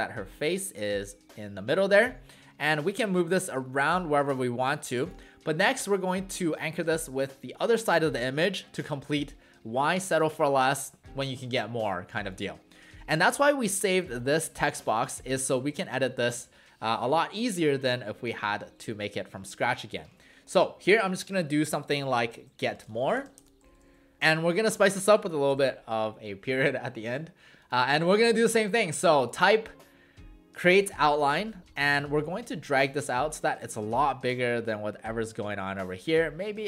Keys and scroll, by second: 20.1 ctrl+a, 21.7-24.2 typing.